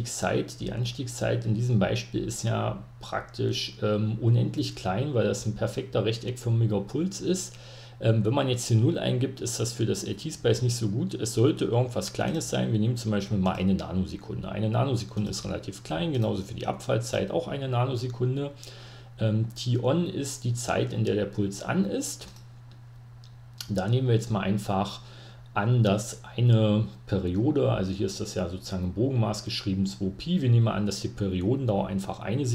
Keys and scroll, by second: 11.3-13.3 typing, 15.8-18.1 typing, 32.0-32.5 typing.